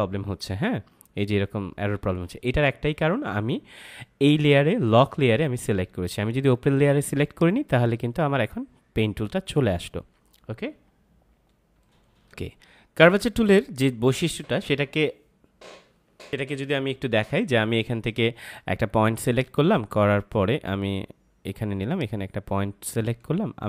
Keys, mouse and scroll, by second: 2.2 F5, 7.2 click, 12.2 ctrl+m, 16.3 m, 19.2 click, 23.4 ctrl+z.